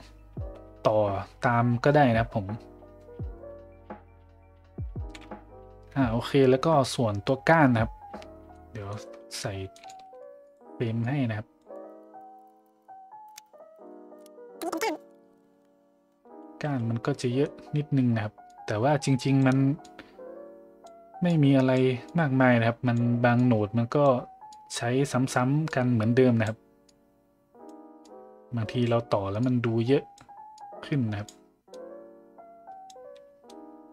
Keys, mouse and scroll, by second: 8.6 middle click, 9.8 click, 11.0 click, 11.9 drag, 12.2 click, 12.4 drag, 12.5 click, 12.6 click, 12.8 click, 13.3 click, 13.5 click, 13.7 click, 14.8-15.8 drag, 17.2 middle click, 18.5-19.4 drag, 19.8-20.9 drag, 21.3 click, 22.1 click, 23.4 click, 24.5 click, 25.7 click, 26.8 click, 28.1 click, 29.5 click, 30.6 click, 31.8-32.9 drag, 33.4 click.